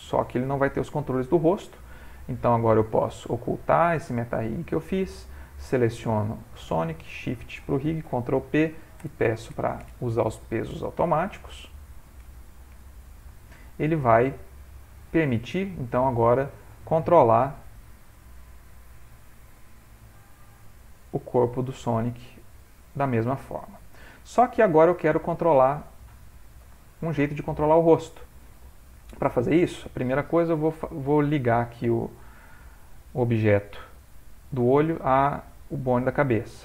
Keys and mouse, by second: 1.4 middle click, 4.3 click, 5.6 click, 6.9 shift+click, 7.1 shift+click, 8.1 ctrl+p, 14.8 click, 15.9 ctrl+Tab, 16.3 click, 17.5 r, 21.3 click, 22.4 g, 24.6 middle click, 26.1 middle click, 26.4 ctrl+middle click, 26.6 ctrl+middle click, 26.8 shift+middle click, 27.0-29.1 shift+middle click, 27.4 ctrl+middle click, 27.9 middle click, 28.3 middle click, 28.6 middle click, 28.8 shift+middle click, 28.9 middle click, 29.0 middle click, 30.4 click, 31.5 click, 32.1 middle click, 32.2 middle click, 35.4 shift+click.